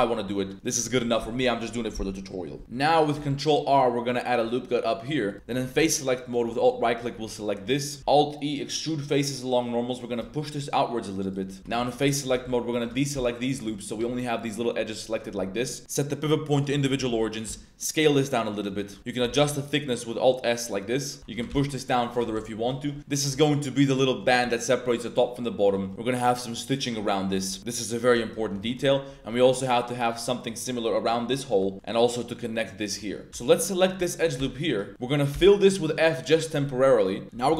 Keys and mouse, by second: 0.3 middle click, 2.6 1, 2.7 middle click, 3.1 ctrl+r, 5.3 3, 5.6 3, 6.2 alt+click, 6.9 shift+drag, 7.6 click, 8.0 alt+e, 11.2 shift+click, 11.6 2, 12.1 alt+shift+click, 13.1 z, 13.5 click, 13.9 g, 15.8-16.6 drag, 17.0 z, 17.4 s, 18.6 click, 19.2 alt+s, 21.2 3, 21.3 g, 21.5 z, 22.2 Tab, 22.4 drag, 22.5 middle drag, 22.7 shift+middle drag, 23.0 middle drag, 23.9 middle drag, 25.2-25.5 middle drag, 25.8 shift+middle click, 27.0 middle drag, 27.6-28.1 middle drag, 28.4 Tab, 28.6 shift+middle drag, 28.9 middle click, 29.3 shift+middle drag, 30.3 middle click, 31.5 middle click, 31.7 middle click, 32.9 middle click, 33.3 alt+1, 34.0 alt+click, 34.3 f, 34.9 ctrl+z, 34.9 middle click, 35.3 f, 36.0 middle click.